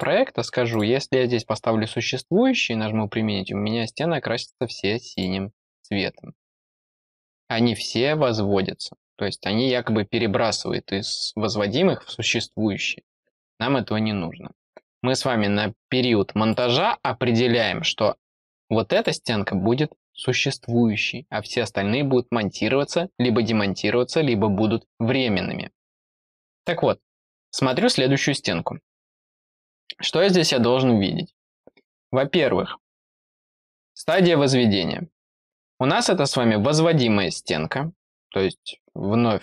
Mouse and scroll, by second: 0.6 click, 5.0 click, 14.5 click, 16.4 click, 18.9 click, 26.5 click, 27.6 click.